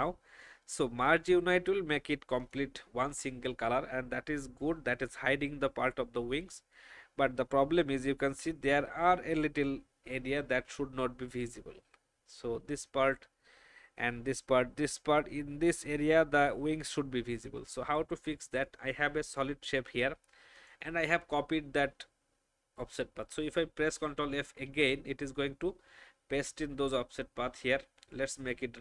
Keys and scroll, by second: 24.6 ctrl+f.